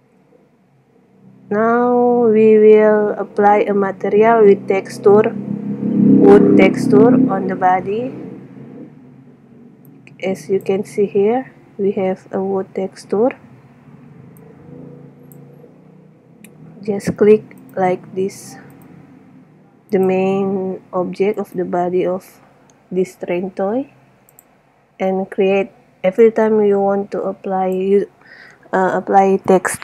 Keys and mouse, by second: 0.0 Escape, 20.7 middle click, 21.7 right click, 23.3-24.4 middle drag, 24.7-26.0 drag, 28.1 middle click.